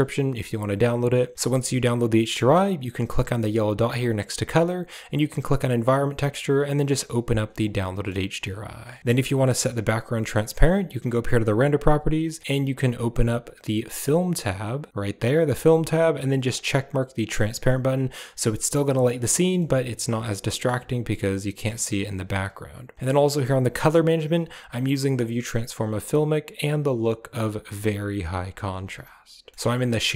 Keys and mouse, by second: 3.7-6.4 drag, 7.7 middle click, 9.4 click, 10.9 click, 13.7-14.8 drag, 16.4 click, 17.1 click, 17.7-19.0 middle drag, 19.6-20.6 middle drag, 21.1-21.6 middle drag, 24.5 click, 26.5-28.9 drag.